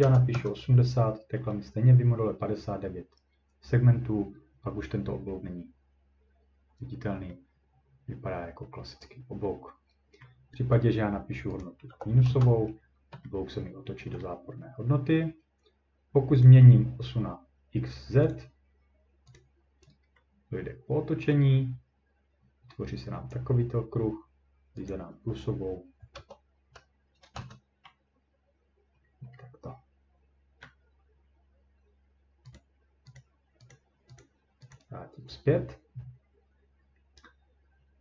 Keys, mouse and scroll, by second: 0.0-0.5 typing, 10.2 middle click, 11.6 click, 11.9 -, 12.3 Return, 12.7 scroll down 2, 14.2 middle click, 16.4 click, 18.3 click, 19.1 scroll, 19.4 click, 19.8 middle click, 21.2 scroll up 1, 21.3-23.3 scroll down 2, 24.9 click, 26.1 BackSpace, 27.3 Return, 29.0 ctrl+middle click, 30.6 middle click, 32.6 click, 32.6-32.9 scroll, 33.2 click, 33.7 click, 34.2 click, 34.7 click.